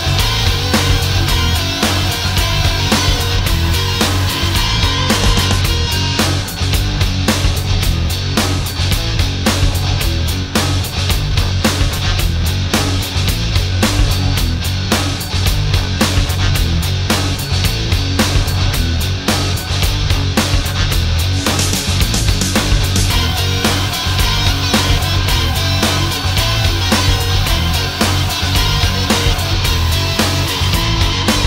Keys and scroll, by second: 9.6 space, 12.0 space, 19.8 ctrl+z, 21.1 space, 29.1 ctrl+z.